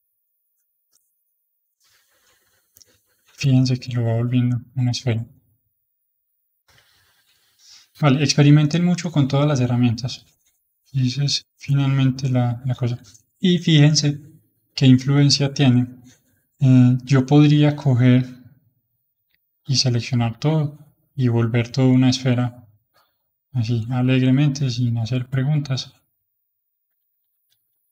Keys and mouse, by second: 2.1-3.8 middle drag, 3.8 click, 5.4 click, 6.7 click, 7.5-10.1 middle drag, 10.1-11.3 drag, 11.3 h, 11.7-16.0 middle drag, 17.3-19.3 drag, 19.3-20.4 middle drag, 20.4 click, 22.7 click, 23.6 click, 24.5 click, 25.1-27.0 middle drag, 27.0 ctrl+z, 27.3 ctrl+z, 27.5 ctrl+z, 27.7 ctrl+z.